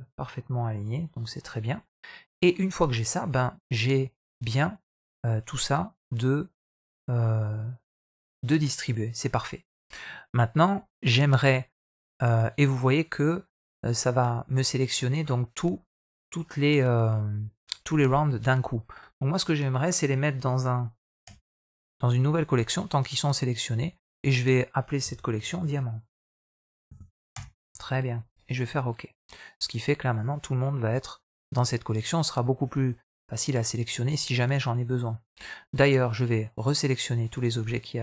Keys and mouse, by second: 0.9 shift+middle click, 1.3-2.2 middle drag, 2.8-5.5 middle drag, 21.1 m, 30.0 click, 32.9-33.8 right drag, 35.5-37.1 right drag.